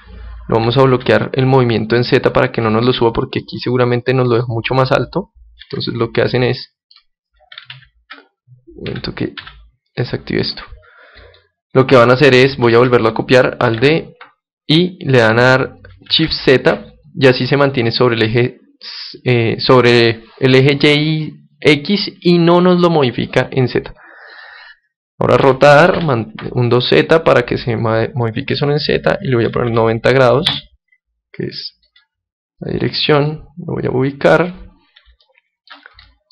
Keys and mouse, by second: 3.0-4.9 drag, 3.4-5.2 middle drag, 5.6 alt+z, 6.6-8.4 middle drag, 7.7 ctrl+z, 8.8 z, 9.3 z, 10.1-11.3 middle drag, 11.3-13.2 drag, 12.6 ctrl+z, 13.7 alt+d, 24.3-26.2 drag, 25.4 r, 26.3 r, 31.8-35.2 drag, 35.1-36.3 middle drag.